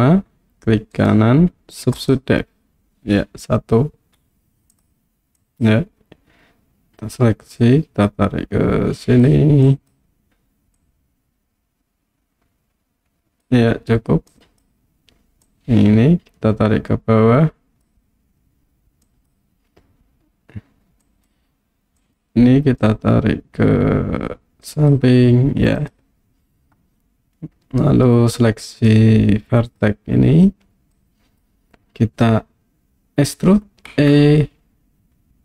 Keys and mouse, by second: 1.1 right click, 5.4 click, 7.5-9.2 drag, 9.8 click, 10.8-13.4 drag, 14.3 click, 15.5-17.9 drag, 19.2 click, 21.2 click, 22.2 click, 22.9-24.9 drag, 25.8 click, 28.9 click, 30.9 click, 33.9 e.